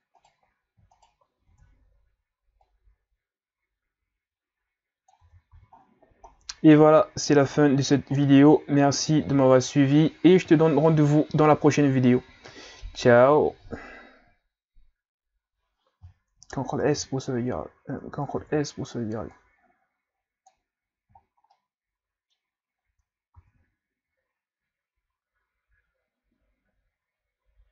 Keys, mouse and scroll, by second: 0.2 shift+right click, 0.9 shift+right click, 1.5 Tab, 2.7-5.3 drag, 5.3 Tab, 5.5 a, 5.8-7.3 scroll down 11, 7.3-8.3 scroll up 5, 8.3-14.0 middle drag, 16.8 ctrl+c, 18.4 ctrl+s, 19.3-20.8 drag, 20.8-21.3 scroll down 3, 21.5-23.4 middle drag, 23.4 ctrl+s.